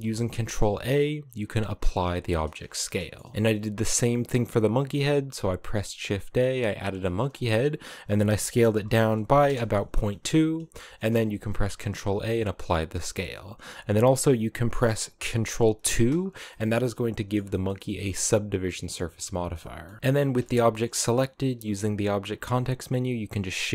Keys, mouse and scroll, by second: 2.5 middle click, 3.3 shift+a, 6.7 scroll down 4, 7.0-7.7 shift+middle drag, 7.7 s, 9.7 scroll up 8, 10.3 scroll down 2, 10.4-10.9 shift+middle drag, 10.9 ctrl+a, 15.6 ctrl+2, 16.2-17.4 middle drag, 17.4-17.8 scroll up 1, 17.8-20.0 middle drag, 20.0 shift+right click, 20.1-21.2 shift+middle drag, 21.2 w, 23.6 scroll down 3.